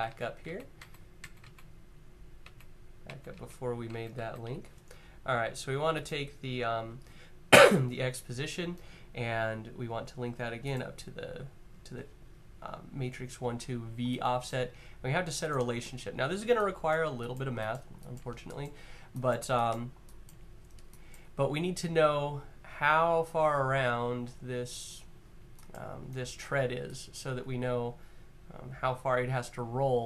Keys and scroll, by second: 0.1 super+z, 1.0 z, 2.1 z, 2.8 super+z.